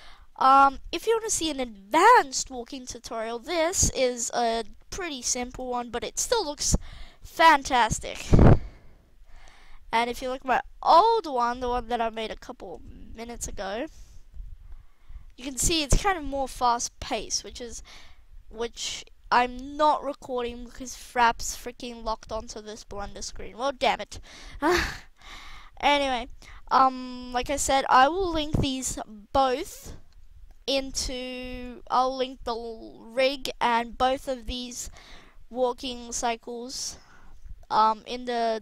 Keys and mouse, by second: 0.6-2.6 middle drag, 2.7 middle click, 3.3 middle click, 4.8-5.9 middle drag, 7.0 alt+a, 9.3 alt+a, 18.4 middle click, 18.8-21.8 middle drag, 22.6-24.2 middle drag, 26.1 middle drag, 26.3 middle click, 26.8-29.8 middle drag, 29.8-30.4 middle drag, 30.6-32.2 middle drag, 33.4-34.9 middle drag, 35.7-36.4 middle drag, 36.5 middle click, 36.8-38.5 middle drag, 38.5 alt+a.